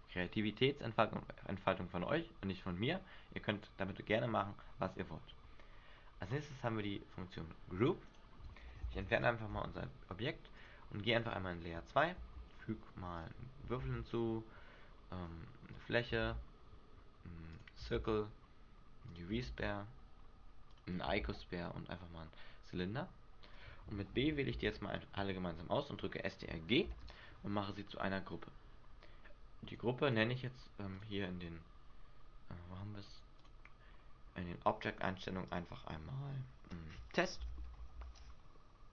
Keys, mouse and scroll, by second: 6.4 click, 8.2 right click, 9.1 Delete, 10.7 click, 11.3 click, 12.3 shift+a, 14.0 shift+a, 16.4 shift+a, 18.1 shift+a, 24.7 b, 27.0 ctrl+g, 28.1-28.6 scroll up 4, 29.8 click, 30.2 click, 33.6 click, 35.6 click.